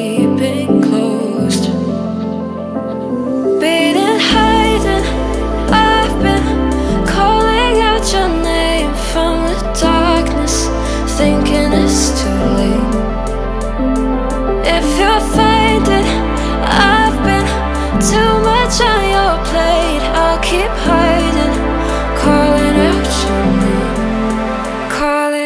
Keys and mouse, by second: 1.0 y, 1.6 click, 1.7 g, 1.8 x, 3.6 click, 3.7 g, 3.7 z, 4.6 click, 4.8 middle click, 5.6 y, 6.2 click, 6.9 middle click, 7.8 right click, 8.2 shift+click, 8.7 z, 9.6-11.3 drag, 11.5 KP_1, 13.1 click, 13.4 shift+click, 14.0 x, 14.6 click, 16.2 shift+middle click, 16.7 click, 17.0 shift+click, 17.9 g, 18.0 z, 18.9 click, 19.3 shift+middle click, 20.0 click, 20.4 middle click, 21.0 y, 21.6 click, 21.7 g, 21.7 x, 22.3 click, 23.0 click, 23.5 KP_1, 24.2 middle click.